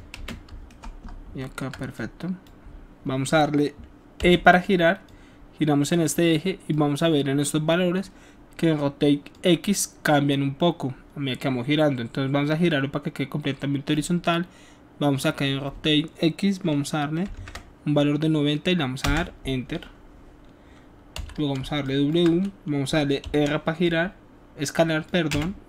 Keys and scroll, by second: 0.1 space, 4.3 e, 17.3 KP_9, 17.5 KP_0, 19.0 Return, 21.1 w, 23.1 r, 25.2 space.